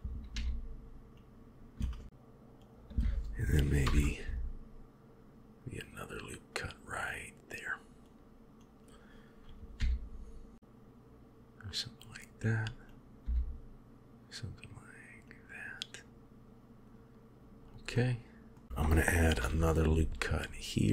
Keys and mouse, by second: 0.2 g, 2.0 g, 3.7 ctrl+r, 8.5-9.7 drag, 9.7 g, 12.9 click, 13.2 g, 17.8 middle click, 19.2 ctrl+r.